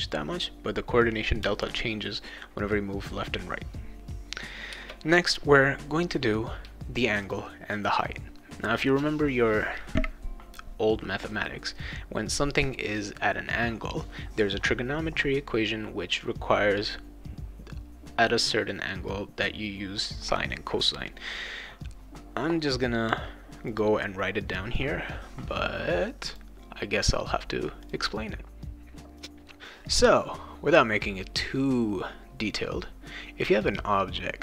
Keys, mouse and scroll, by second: 1.4 Return, 4.7 Return, 7.2 click, 7.9 click, 23.7 click, 26.3 click, 27.8 click, 29.0 click, 33.4 click.